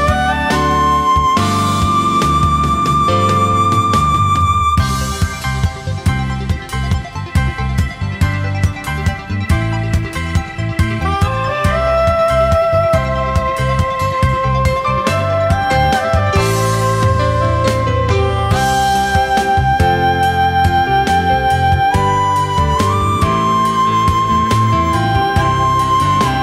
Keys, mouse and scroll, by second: 0.1 space, 0.3 alt+click, 0.5 alt+click, 0.7 alt+click, 0.9 alt+click, 1.2 alt+click, 1.5 alt+click, 1.8 alt+click, 2.0 alt+click, 2.2 space, 2.7 alt+click, 2.9 alt+click, 3.5 alt+click, 3.9 alt+scroll down 1, 4.4 alt+click, 4.9 alt+click, 5.3 alt+click, 5.6 alt+click, 5.8 alt+click, 6.6 alt+scroll down 2, 6.7 space, 6.9-7.4 alt+scroll up 3, 7.0 space, 7.2 space, 7.8 alt+click, 8.7 alt+click, 9.1 alt+scroll up 1, 9.5 alt+click, 9.9 alt+scroll down 1, 9.9 space, 10.1 alt+click, 10.3 alt+scroll up 1, 10.5 alt+click, 11.1-14.6 typing, 11.2 alt+click, 11.5 alt+click, 11.8 alt+click, 12.0 alt+scroll down 1, 12.2 alt+click, 12.5 alt+click, 12.7 alt+click, 12.9 alt+click, 13.1 alt+click, 13.4 alt+click, 13.7 alt+click, 14.8 alt+click, 15.1 alt+click, 15.3 alt+click, 15.9-16.2 alt+scroll up 1, 16.4 alt+click, 16.7 alt+click, 17.0 alt+click, 17.4 alt+click, 17.7 alt+click, 17.8 space, 17.9 alt+click, 18.2 ctrl+shift+a, 18.2 alt+scroll down 1, 18.5 alt+click, 18.9 alt+shift+click, 19.4 alt+click, 19.6 alt+click, 20.0 alt+click, 20.2 alt+click, 20.5 alt+click, 20.6 alt+click, 21.1 alt+click, 21.3 alt+click, 21.4 alt+click, 21.5 space, 21.9 alt+click, 22.0 alt+click, 22.2 alt+click, 22.5 alt+click, 22.6 alt+click, 22.8 alt+click, 23.1 alt+click, 23.4 alt+click, 23.7 alt+click, 24.0 space, 24.1 alt+click, 24.3-24.7 alt+scroll down 2, 24.7-25.4 alt+scroll up 3, 25.6 alt+click, 25.9 alt+click, 26.1 alt+click, 26.3 alt+click.